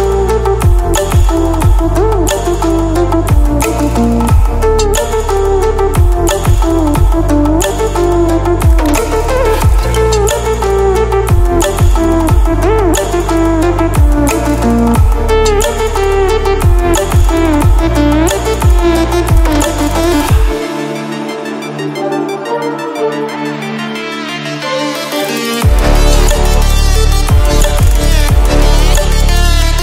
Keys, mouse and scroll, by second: 0.0-10.7 drag, 10.7 ctrl+w, 13.1 ctrl+w, 14.9-20.9 alt+drag, 20.9 ctrl+alt+scroll down 1, 21.9-23.2 ctrl+alt+scroll up 1, 24.1-25.7 drag, 26.9 ctrl+alt+scroll down 1, 28.5-29.8 drag.